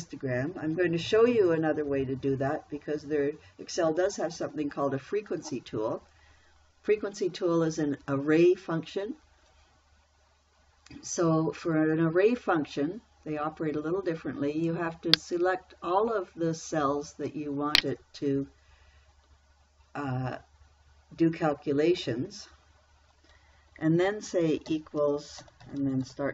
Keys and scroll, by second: 25.1-26.3 typing.